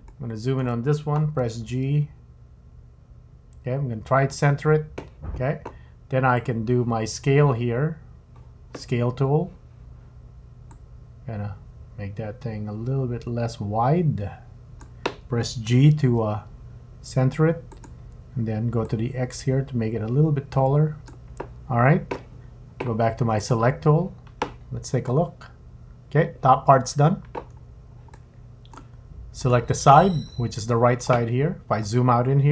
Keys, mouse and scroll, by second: 0.1 shift+middle click, 1.5 g, 6.4 click, 10.7 click, 12.3 click, 16.0 g, 18.8 click, 23.4 click, 25.1 middle click, 27.5-28.1 scroll down 3, 28.1 middle click, 29.4 click, 31.7-32.4 scroll down 5.